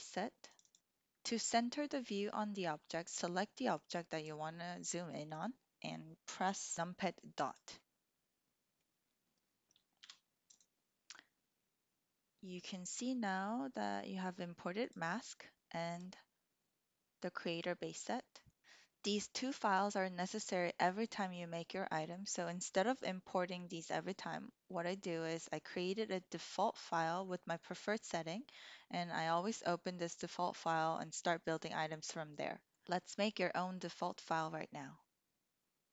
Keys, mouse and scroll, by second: 3.8 click, 6.7 KP_Decimal, 7.8-8.8 drag, 9.9 KP_1, 10.4 click, 15.9 click.